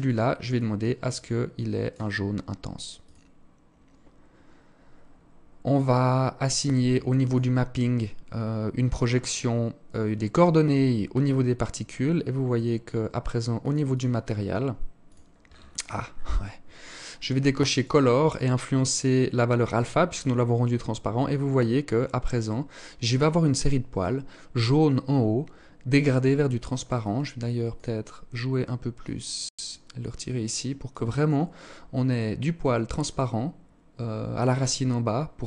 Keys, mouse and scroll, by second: 5.1-5.7 scroll down 5, 6.4 click, 6.4-7.3 scroll down 3, 8.0 click, 11.1-11.5 scroll up 3, 12.1-12.7 scroll up 7, 12.7 click, 12.7-13.1 scroll up 1, 13.1 click, 14.6-15.0 scroll down 10, 15.0 scroll up 1, 15.2-16.0 scroll down 3, 16.9 click, 17.4 click, 19.3-21.6 scroll up 14, 26.2 click.